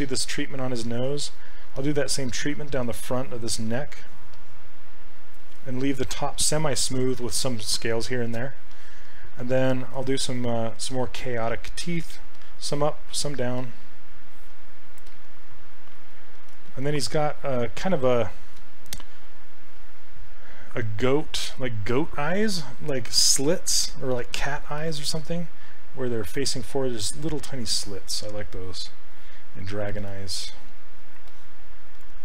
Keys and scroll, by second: 17.1 s.